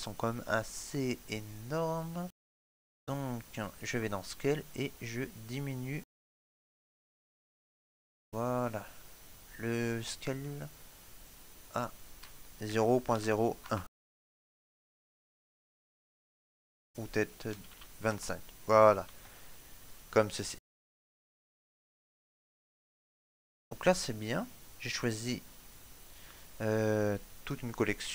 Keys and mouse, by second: 4.1 click, 10.0 shift+middle click, 11.1 click, 18.9 click, 19.9 shift+middle click, 20.2 middle click, 24.6 click.